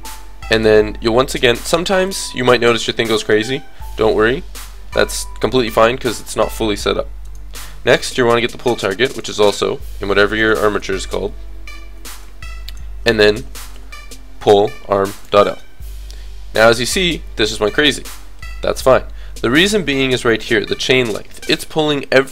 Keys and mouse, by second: 0.5-2.5 drag, 7.3-9.1 drag, 9.3-10.3 middle drag, 12.7-14.7 drag, 14.7-16.7 middle drag.